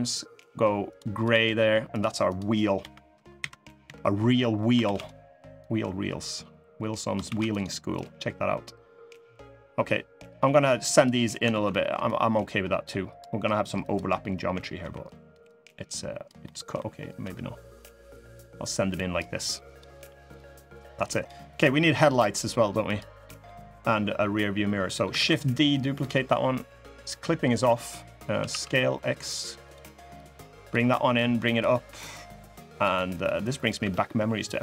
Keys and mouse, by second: 1.0 click, 1.7 click, 2.0 click, 2.5 l, 3.1 KP_7, 3.6 KP_3, 4.6 shift+d, 5.3-6.7 drag, 7.1 shift+d, 7.7-10.8 drag, 11.2 ctrl+z, 11.8-12.9 drag, 14.5 l, 15.2 click, 16.2 middle click, 17.0 l, 17.5-18.9 drag, 19.4 click, 20.1 click, 21.2 click, 21.6 middle click, 23.0 middle click, 24.6 middle click, 24.9 shift+d, 28.1 s, 29.9 click, 30.9 click, 31.8 click, 33.0 click, 33.5 e.